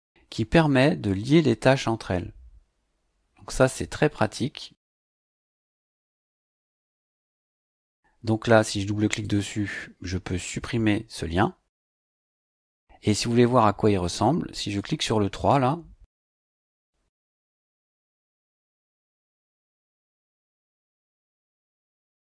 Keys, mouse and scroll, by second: 4.9-7.0 drag, 8.5 click, 9.2 click, 12.1 click, 14.6 click, 18.2-19.9 drag, 20.6 click.